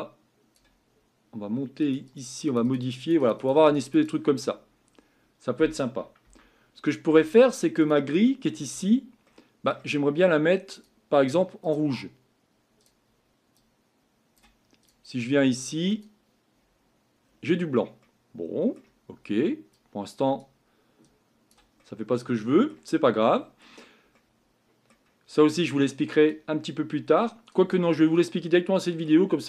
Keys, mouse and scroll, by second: 4.5-4.9 scroll up 4, 4.9-5.5 scroll down 5, 6.3 Tab, 7.1 Tab, 7.9 click, 11.8-13.5 drag, 14.9 click, 15.9 click, 16.6-17.2 scroll up 5, 17.2-18.0 scroll down 4, 18.0-18.7 scroll down 1.